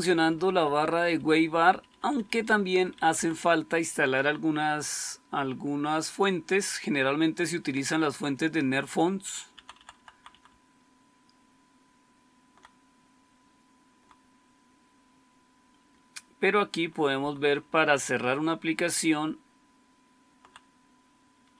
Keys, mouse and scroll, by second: 0.0-0.5 typing, 0.7 Up, 0.9 Up, 1.1 Up, 1.3 Up, 1.4 Up, 1.6 Up, 1.8 Up, 1.9 Up, 2.1 Up, 2.4 Up, 2.6 Up, 2.8 Up, 3.0 Up, 9.4 Down, 9.6 Down, 9.9 Down, 10.0 Down, 10.2-12.4 Down, 12.8-13.8 Down, 14.3-16.7 Down, 17.1 Down, 17.4 Down, 17.5 Down, 17.7-20.3 Down, 21.3 Up, 21.5 Up.